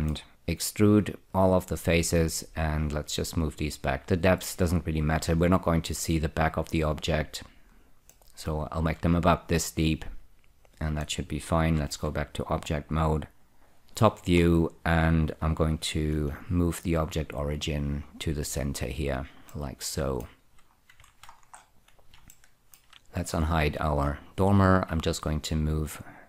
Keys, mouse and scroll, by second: 0.0 middle click, 0.3 4, 1.2 click, 1.6-5.8 drag, 8.4-11.6 middle drag, 12.2 Tab, 13.6 F2, 14.3-16.1 scroll up 2, 16.4 ctrl+<, 17.2 click, 19.8 middle click, 20.8-21.3 scroll down 2, 21.4 ctrl+<, 22.6 shift+middle click, 23.5 click, 25.7 click.